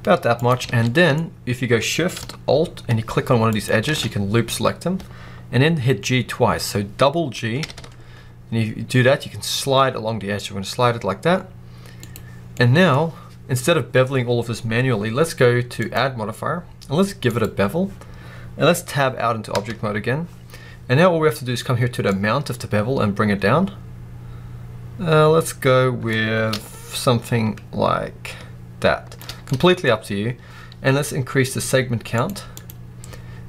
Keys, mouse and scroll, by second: 0.3 click, 0.5 alt+a, 0.8 middle click, 1.0 scroll up 1, 3.4 alt+shift+click, 7.5 g, 12.0 click, 12.2 scroll down 1, 12.5-15.7 middle drag, 12.8-15.7 scroll up 2, 15.7-29.3 drag, 19.4 Tab, 29.3-32.0 middle drag, 29.7-31.9 scroll up 2, 31.9 scroll up 1, 32.0-33.4 drag.